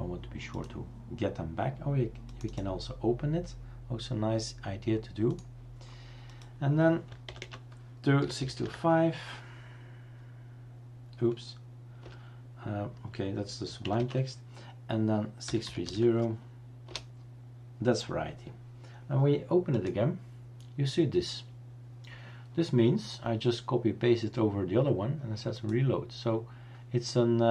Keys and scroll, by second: 7.3-9.9 typing, 12.0 Return, 14.0 typing, 15.4-16.3 typing, 16.9 Return, 18.1 typing.